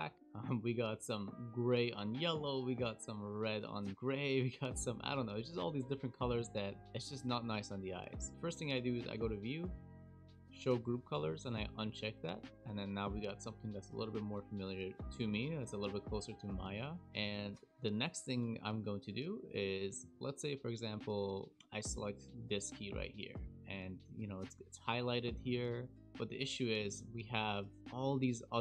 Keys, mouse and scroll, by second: 1.7-2.2 scroll down 3, 2.2 scroll down 3, 2.9-3.7 scroll down 1, 3.7-4.8 scroll down 6, 4.8-6.2 scroll down 12, 5.9-7.7 scroll up 34, 12.4-16.2 scroll down 6, 16.6-18.1 scroll up 11, 20.1-20.6 scroll up 3, 20.7 shift+middle click, 21.7 click, 27.7 click, 27.8-28.6 scroll down 19.